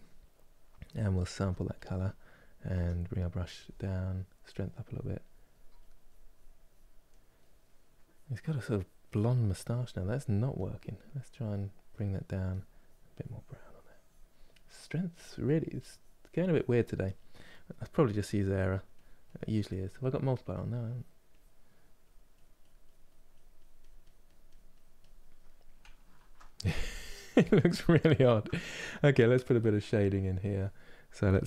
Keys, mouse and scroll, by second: 2.5 f, 3.9-6.8 drag, 6.8-7.8 middle drag, 7.8-10.4 drag, 11.2-16.7 drag, 16.7-17.8 middle drag, 17.8-25.1 drag, 25.1-31.4 middle drag.